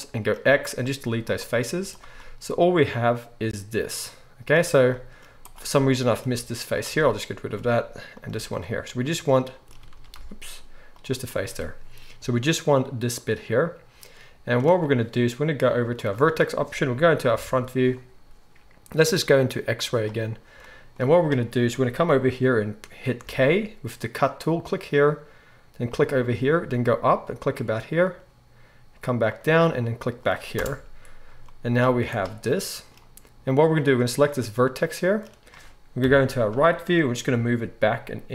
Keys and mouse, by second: 0.4 x, 1.7 z, 5.5-8.1 middle drag, 6.3 x, 8.1 click, 8.3-15.9 middle drag, 8.3 x, 9.9 ctrl+z, 10.1 x, 15.9-33.9 drag, 17.3 KP_1, 23.2 k, 31.8 z, 33.9-38.3 middle drag, 36.0 KP_3, 37.2 g.